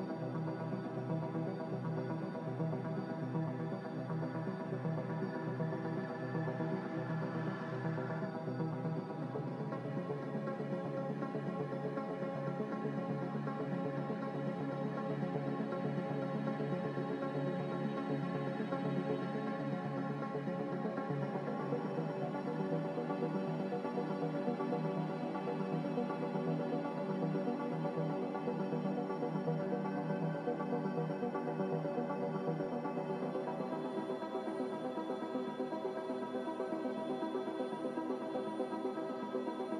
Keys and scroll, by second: 0.9 ctrl+z, 2.8 Escape, 3.2 a, 5.1 z, 8.6-10.5 typing, 11.2 Return, 15.7 m, 16.6 Escape, 19.0 z, 20.1-22.5 typing, 23.7-25.2 typing, 28.8 m, 31.0 z, 37.0 m.